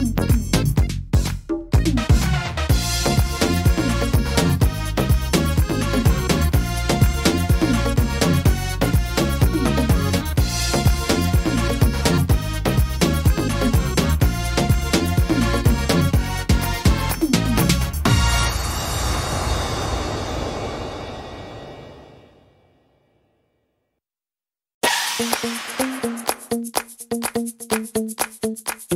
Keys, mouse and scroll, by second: 0.2 middle click, 0.6 scroll up 3, 1.0 middle click, 1.8 middle click, 2.4 right click, 2.9 shift+right click, 4.0 x, 5.1 middle click, 5.8 middle click, 7.4 right click, 8.0 shift+right click, 9.1 x, 10.2 middle click, 11.0-11.3 scroll up 1, 11.3 middle click, 12.6 right click, 13.7 shift+right click, 14.2 right click, 15.1 click, 15.9 ctrl+z, 16.6 right click, 17.1 right click, 17.9 click, 20.7 middle click, 21.5 middle click, 21.5 scroll down 2, 22.2 shift+middle click, 23.7 right click, 24.4 middle click, 25.7 click, 27.9-28.7 scroll down 4, 28.3 middle click, 28.8 scroll up 2.